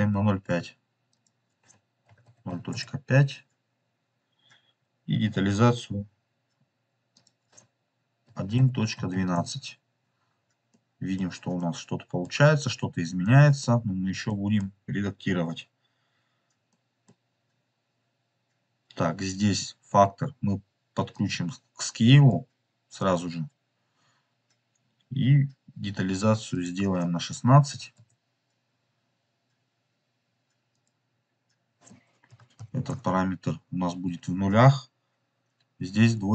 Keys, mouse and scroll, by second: 1.0-3.7 drag, 3.4 scroll up 1, 7.1-10.0 drag, 10.6 middle click, 11.4 middle click, 12.3-13.1 scroll up 2, 13.1-13.5 middle drag, 13.1 scroll up 1, 14.2-15.6 middle drag, 16.6 middle click, 17.2 scroll up 3, 20.2-21.0 scroll up 1, 21.0 scroll up 1, 21.0-22.2 drag, 26.5-28.9 drag, 30.6-33.8 drag, 35.9-36.3 scroll down 6.